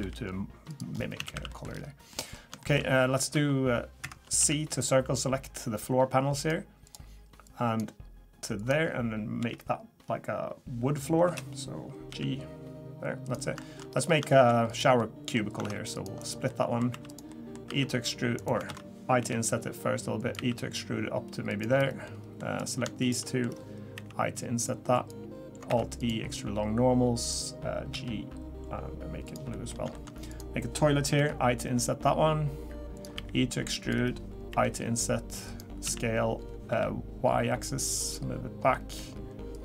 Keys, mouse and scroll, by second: 0.0 g, 0.9-1.3 scroll down 5, 1.2 a, 1.3 a, 1.5 middle click, 1.7-2.2 scroll up 4, 2.1 middle click, 2.3 scroll down 1, 2.6 shift+middle click, 3.3 3, 4.0 Escape, 4.4 c, 12.1 g, 13.6 shift+middle click, 13.9-14.2 scroll up 4, 14.3 shift+middle click, 14.7 click, 15.0 middle click, 15.6 ctrl+r, 16.5 middle click, 16.9 3, 17.1 click, 17.3 middle click, 17.7 e, 18.7 ctrl+z, 19.2 i, 20.3 e, 22.0 middle click, 22.6 click, 23.0 shift+click, 23.2 middle click, 23.9 i, 25.7 alt+e, 27.9 g, 29.5 middle click, 29.9 shift+middle click, 30.3 click, 31.1 i, 33.1 e, 34.5 i, 35.8 s, 38.7 middle click, 39.5 click.